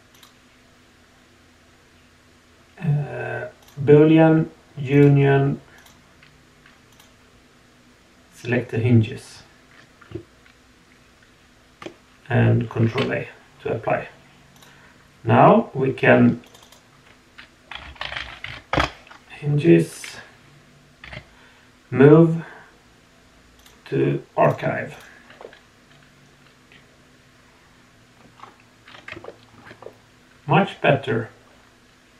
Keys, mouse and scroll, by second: 0.1-3.7 drag, 4.9 click, 5.7 click, 13.0 ctrl+a, 14.5 click, 16.4 click, 16.6-18.7 drag, 24.4 click, 24.9 click, 25.4-26.0 middle drag, 26.4 click, 26.4-27.0 middle drag, 27.0 click, 27.2-27.8 middle drag, 27.8 drag, 28.0 middle click, 28.0 drag, 28.3-29.1 scroll down 2, 29.2-29.5 shift+middle drag, 29.8-31.8 middle drag, 31.8-32.1 drag.